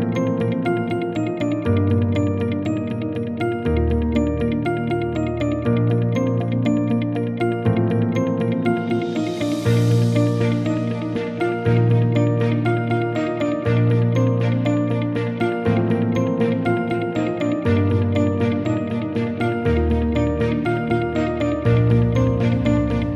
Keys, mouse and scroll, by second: 0.3 click, 2.5 click, 3.3 click, 6.0 click, 9.9 click, 14.2 right click.